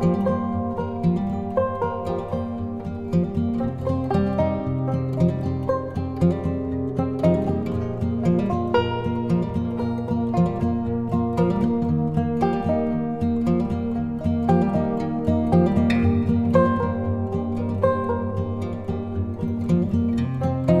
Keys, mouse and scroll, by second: 1.4 Return, 3.1-5.3 drag, 5.3 ctrl+t, 6.4-13.0 alt+drag, 13.0 Return, 14.0 click, 17.2 click, 18.0 z, 18.8-20.8 drag.